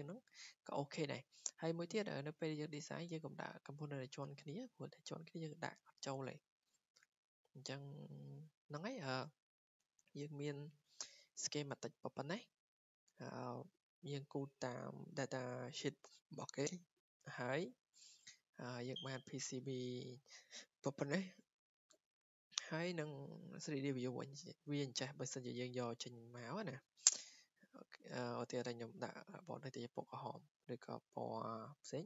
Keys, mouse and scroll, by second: 2.2-7.3 drag, 10.1 click, 10.8 click, 13.1 click, 14.1 click, 18.0 click, 21.9 click, 28.6 click, 29.4 click, 30.8 click, 31.2 click.